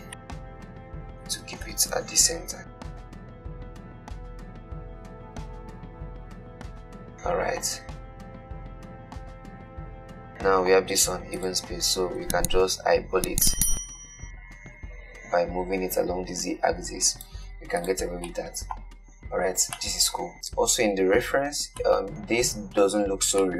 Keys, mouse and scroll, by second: 0.4-1.5 shift+middle drag, 1.5 shift+d, 6.3 click, 6.9-11.6 middle drag, 11.6 click, 12.5 g, 18.1 click, 18.5-19.5 middle drag, 19.5-20.0 scroll down 1, 20.0-23.5 middle drag.